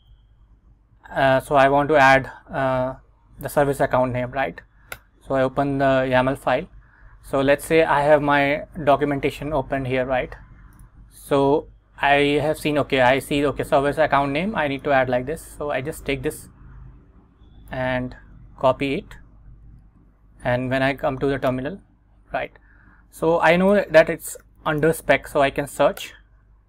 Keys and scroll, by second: 0.1 Up, 5.1 Return, 7.7 super+Tab, 9.1 Return, 18.8 super+c, 19.9 super+Tab, 21.6 Return, 23.8-25.5 typing, 26.1 Return.